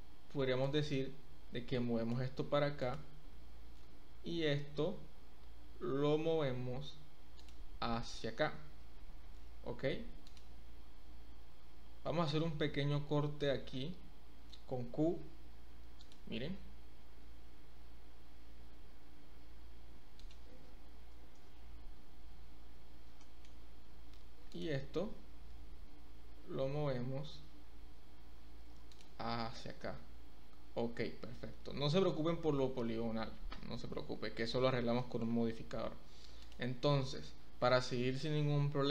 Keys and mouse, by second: 0.6-2.1 drag, 2.7 click, 3.7 g, 9.2 ctrl+r, 11.7 Escape, 12.8 ctrl+z, 13.4 shift+middle click, 15.0 k, 23.2 shift+middle click, 25.5 g, 29.3 Tab, 31.6 Tab, 35.1 shift+middle click, 36.5 click.